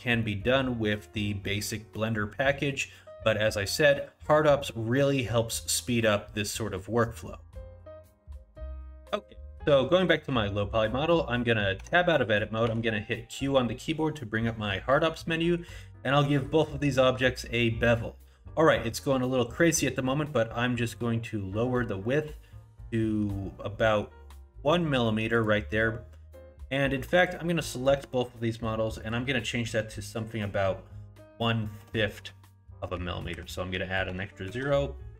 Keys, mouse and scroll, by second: 0.2 middle click, 2.5 middle click, 3.7 middle click, 6.1 middle click, 7.9 Tab, 11.8 Tab, 12.6 q, 27.2 click, 29.0 click.